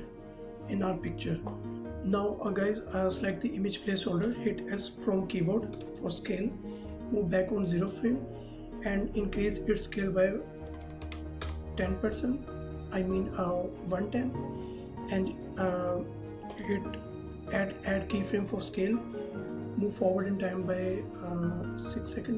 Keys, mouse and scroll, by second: 1.7 click, 4.2 click, 5.7 s, 7.3 click, 10.6 KP_1, 11.0 KP_0, 11.4 KP_Enter, 16.5 click, 20.9 click.